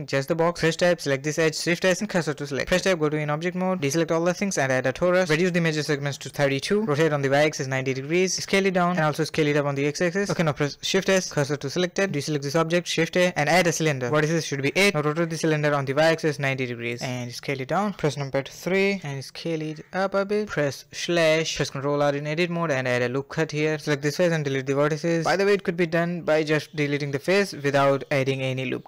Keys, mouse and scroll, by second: 0.0 click, 0.3 shift+s, 1.9 Tab, 2.2 a, 2.3 a, 3.6 shift+a, 5.2 click, 6.4-9.2 typing, 9.8-10.4 middle drag, 10.4-10.8 scroll up 1, 10.8 middle click, 10.8 click, 10.9 shift+s, 11.7 a, 15.2 r, 16.9 s, 17.4 KP_3, 18.3 ctrl+KP_3, 18.7-19.1 scroll up 4, 18.8 shift+middle drag, 19.1 shift+middle click, 19.2 s, 19.7 Tab, 20.6 middle click, 21.2 ctrl+r, 22.3 middle click, 22.6 3, 22.8 click, 23.2 x.